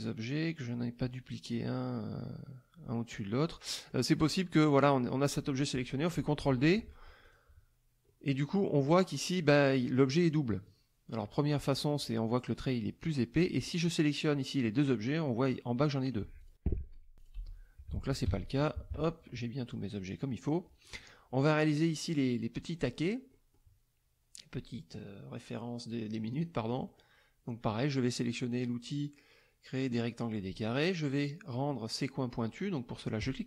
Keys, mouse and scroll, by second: 3.5 middle click, 4.7 click, 6.4 ctrl+d, 7.2 click, 8.0-8.5 middle drag, 13.4-14.2 drag, 16.4 click, 17.2 click, 17.4 Delete, 18.2 ctrl+KP_5, 18.6 ctrl+KP_Subtract, 19.7 middle click, 20.8 middle click, 22.5 middle click, 23.3 middle click, 26.3 click, 26.7 middle click, 28.4-30.1 drag, 33.2 click.